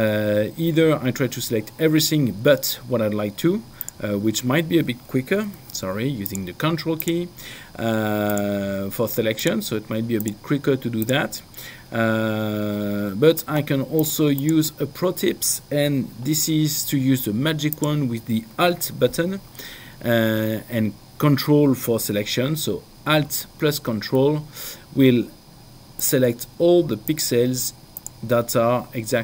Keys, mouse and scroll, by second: 3.9 click, 5.6 ctrl+z, 6.4 ctrl+click, 8.3 ctrl+click, 14.3 click, 17.8 click, 26.2 ctrl+alt+click.